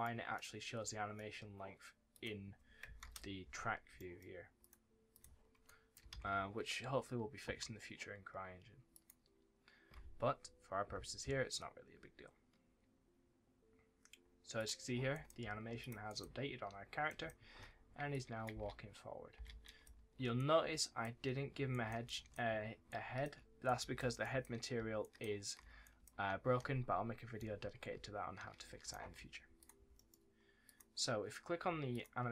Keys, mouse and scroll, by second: 0.5 scroll down 1, 0.8 middle click, 1.3-1.6 scroll up 1, 2.0 click, 2.7 KP_0, 2.9 KP_Enter, 3.6 scroll down 1, 3.9 middle click, 4.3 scroll up 1, 4.5 click, 5.6 right click, 6.0 ctrl+s, 8.2 ctrl+s, 8.8 click, 11.3 click, 11.8-13.6 scroll up 1, 14.5 click, 15.0 right click, 15.3 w, 15.7 click, 16.0 right click, 16.1 w, 17.0 right click, 17.1 s, 18.0 click, 18.4 space, 19.6 right click, 19.8 w, 20.3 right click, 20.5 w, 21.6 right click, 21.8 s, 22.0 right click, 23.2-25.9 typing, 23.6 right click, 24.1 right click, 24.9 right click, 25.7 right click, 27.3 right click, 27.9 w, 28.5 s, 29.2-29.5 scroll down 1, 29.5 click, 29.9 middle click, 30.6 click, 31.6 scroll up 1, 31.8 click.